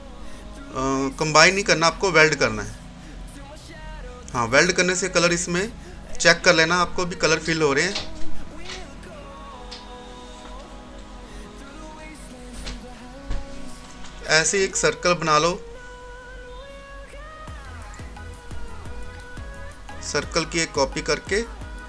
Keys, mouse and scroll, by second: 2.2 click, 2.2 typing, 9.1 scroll down 1, 10.3-18.5 drag, 18.5 right click, 19.7-21.8 drag.